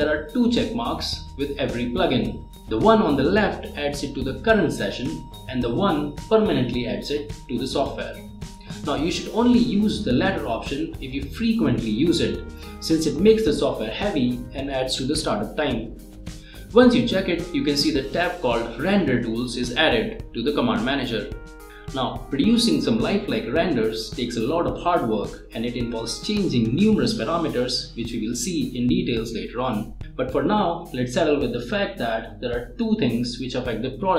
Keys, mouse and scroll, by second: 12.1 scroll down 1, 15.2-15.6 scroll down 1, 15.8 click, 18.2 click, 33.6-34.1 drag.